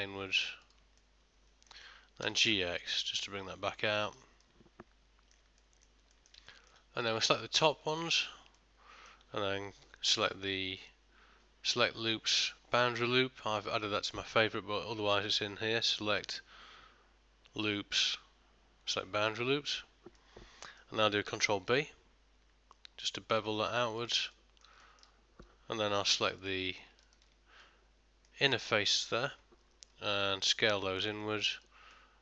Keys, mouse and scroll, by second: 1.1 middle click, 2.3 g, 4.5 middle click, 6.2 ctrl+middle click, 6.5 shift+middle click, 7.1 click, 8.0 ctrl+shift+click, 8.6 middle click, 9.9 q, 16.3 click, 20.2 middle click, 21.6 ctrl+b, 24.4 middle click, 24.9 ctrl+middle click, 26.2 3, 26.5 click, 27.1 ctrl+shift+click, 27.7 middle click, 30.7 s, 32.0 middle click.